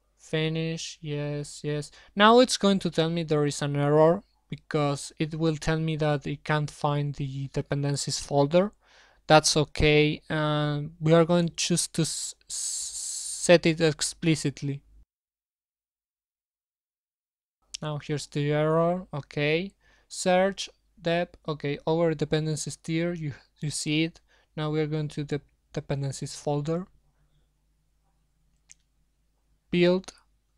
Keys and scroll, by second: 22.8 super+1.